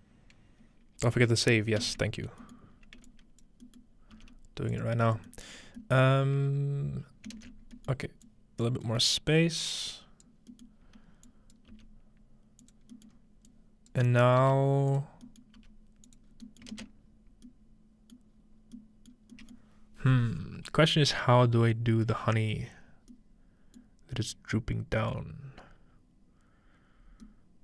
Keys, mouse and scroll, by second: 1.1 middle click, 1.4-3.4 ctrl+middle drag, 2.7-3.1 scroll down 1, 3.1-3.4 drag, 4.2 g, 4.6 click, 4.7 click, 5.0-9.1 scroll down 2, 7.6 typing, 8.3 click, 9.1 scroll up 2, 9.9 click, 11.3 click, 11.7 g, 12.9 scroll down 2, 13.1 scroll up 2, 13.5-16.1 drag, 14.4 typing, 15.1-15.8 scroll down 1, 15.6-17.2 typing, 16.2-17.4 drag, 17.6 ctrl+middle click, 18.9-19.9 scroll down 2, 19.9-20.7 scroll down 1, 24.2 middle click, 27.2-27.6 middle drag.